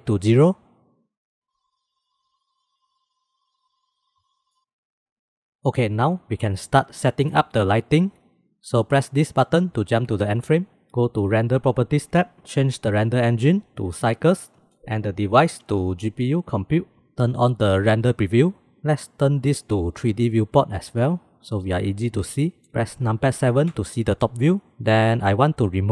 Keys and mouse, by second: 1.5-2.0 drag, 2.0 middle click, 2.8-4.5 middle drag, 4.6 ctrl+s, 5.0 click, 11.8 click, 13.4-14.4 drag, 15.3-17.1 drag, 17.9 click, 20.0-20.9 drag, 22.4 middle click, 22.5-23.7 drag, 23.7 KP_7, 25.0 click.